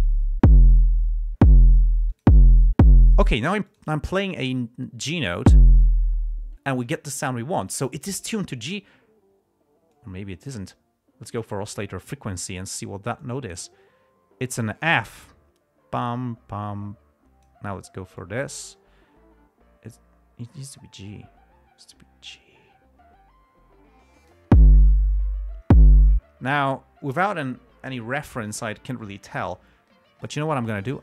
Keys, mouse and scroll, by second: 2.5 click, 4.0 click, 10.3 click, 11.7 click, 12.4 click, 13.6 click, 15.3 click, 18.7-24.9 drag, 26.8 click, 30.6 right click.